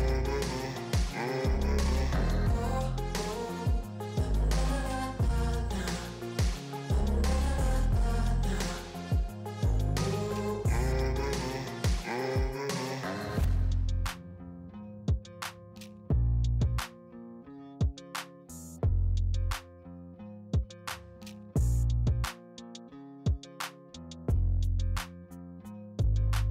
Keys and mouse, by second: 24.9 right click.